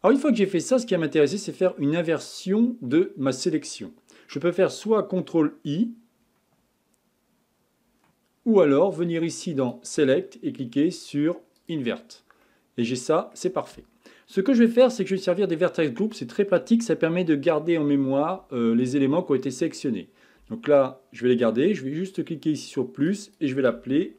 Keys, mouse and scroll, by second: 0.7-3.8 middle drag, 9.6-12.4 drag, 12.4-14.7 middle drag, 14.7 click, 19.1-22.1 middle drag, 22.1-23.2 drag, 23.2-24.1 drag.